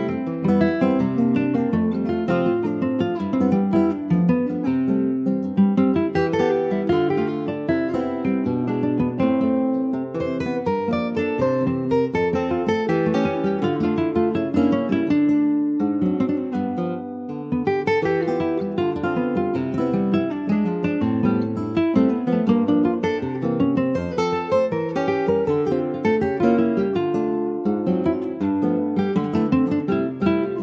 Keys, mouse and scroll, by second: 0.7 ctrl+z, 1.5 click, 2.2 alt+shift+click, 3.0 alt+shift+click, 4.1 alt+shift+click, 5.1 alt+shift+click, 5.6 alt+shift+click, 7.5 f, 8.5 click, 9.1 click, 9.8 alt+shift+click, 10.5 alt+shift+click, 11.6 g, 13.5 click, 13.8 scroll down 1, 14.1-16.2 middle drag, 16.2 scroll up 1, 16.5 shift+middle click, 16.8-18.1 shift+scroll up 4, 17.1 shift+middle click, 18.1 alt+shift+click, 19.4 f, 20.2 Tab, 20.5 click, 20.8 scroll down 1, 21.0-22.1 shift+middle drag, 22.1 shift+scroll up 2, 22.4 middle click, 22.9 click, 23.1 Tab, 23.4 click, 24.3-25.7 alt+shift+drag, 26.2 alt+shift+click, 27.8 f, 28.4 Tab, 28.8 click, 29.1-29.5 scroll down 1, 29.5 click, 29.9-30.6 middle drag.